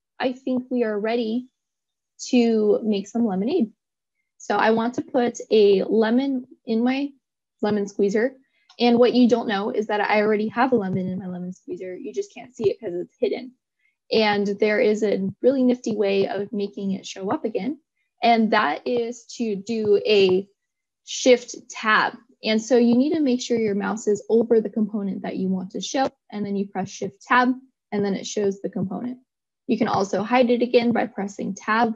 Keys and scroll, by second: 22.1 shift+Tab, 30.2 Tab.